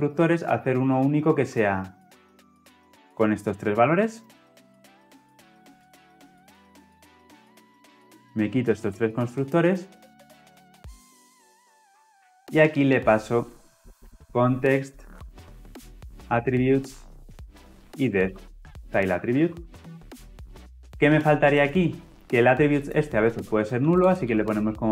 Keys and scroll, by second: 5.7 ctrl+c, 6.5 ctrl+v, 15.1 Return, 19.3 ctrl+alt+l.